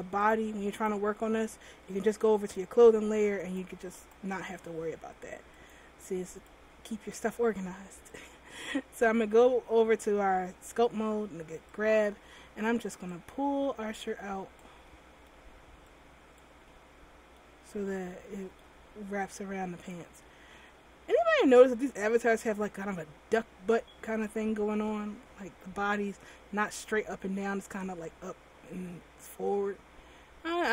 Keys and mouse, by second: 2.5-4.3 middle drag, 4.3 click, 11.8-15.0 middle drag, 15.0-17.8 drag, 17.8 middle click, 20.3-22.8 middle drag.